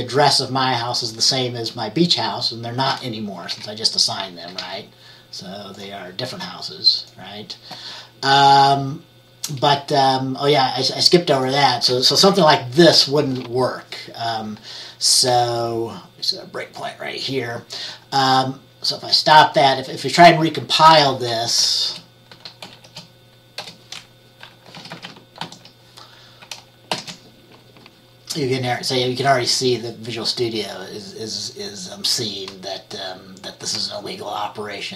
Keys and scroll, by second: 3.6 F10, 4.7 F10, 12.5 BackSpace, 13.0 BackSpace, 22.0 Return, 22.8 {, 23.7 Return, 24.9 typing, 25.5 ctrl+s, 27.0 ctrl+b.